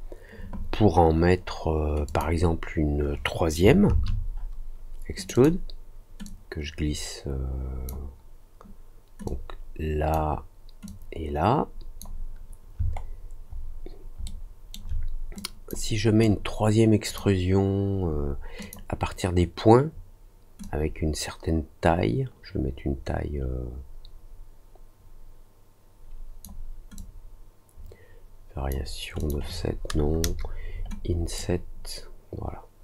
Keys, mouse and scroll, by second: 2.0 click, 5.1 click, 5.3 click, 6.2-7.8 drag, 9.2 click, 10.8-11.9 drag, 12.8 alt+middle click, 13.7 alt+middle click, 14.2 alt+middle click, 15.3 click, 16.2 click, 18.5 click, 20.6-26.4 drag, 26.9-28.6 drag, 29.1 click, 31.3-32.8 drag.